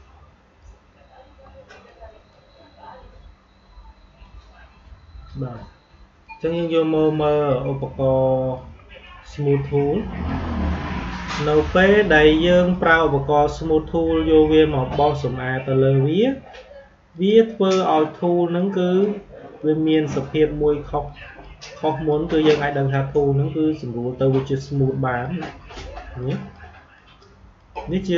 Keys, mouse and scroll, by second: 1.1 Delete, 1.8-6.1 drag, 7.7-11.0 shift+drag, 17.0-26.9 drag.